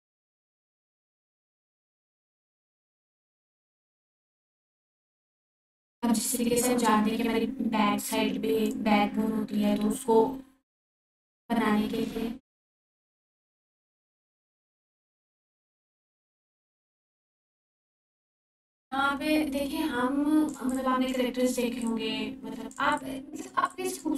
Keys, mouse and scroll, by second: 1.7 ctrl+z, 2.6 f, 3.5-9.8 drag, 13.0 click, 13.3 ctrl+4, 15.9 ctrl+4, 19.0-21.3 drag, 20.7 alt+click, 21.8-22.7 click, 22.9-23.5 alt+click.